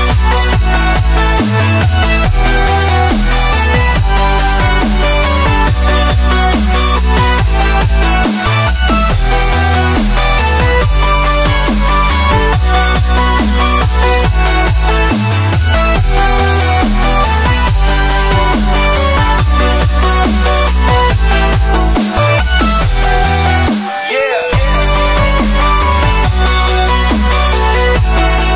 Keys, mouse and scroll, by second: 1.0 Tab, 1.5-1.9 middle drag, 1.9 KP_1, 2.1 KP_3, 2.6-3.7 middle drag, 3.7 scroll down 1, 3.7-4.0 scroll up 1, 4.0 middle click, 4.5 scroll up 1, 4.7-5.0 middle drag, 5.0 drag, 5.3 Tab, 5.8 1, 6.2 shift+middle drag, 6.4 scroll down 1, 6.6 middle click, 7.4 click, 7.6 middle click, 8.0 click, 8.5-9.8 middle drag, 9.8 click, 10.6-11.0 middle drag, 11.0-11.6 scroll up 4, 11.6-13.0 middle drag, 13.0 click, 13.8-15.3 middle drag, 15.3-15.6 scroll down 1, 15.6 middle click, 16.3-18.0 drag, 18.0-18.5 middle drag, 18.5-19.6 drag, 19.6-22.3 middle drag, 20.6 scroll down 1, 20.8 scroll up 1, 21.1-21.4 scroll down 3, 22.3 Tab, 22.7-23.1 scroll down 3, 23.1-23.4 middle drag, 23.4-24.7 drag, 24.7-25.2 scroll up 5, 25.2-26.2 middle drag, 26.2 click, 26.6 scroll down 1, 26.7 middle drag, 27.0 click, 27.2 middle click, 27.7 shift+click, 28.1 s.